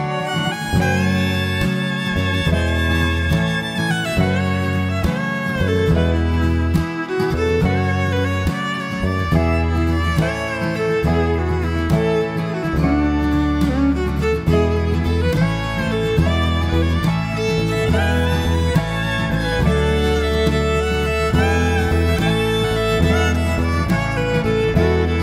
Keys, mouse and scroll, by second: 0.8 KP_7, 1.1 Tab, 1.8 a, 2.3 e, 5.1 middle click, 5.7-6.5 scroll up 2, 5.9 middle click, 18.4 middle click, 19.4 Tab, 19.6 middle click, 19.9-20.3 scroll down 4, 20.1 middle click, 24.3-24.9 scroll up 2, 24.9 shift+middle click, 25.0 middle click.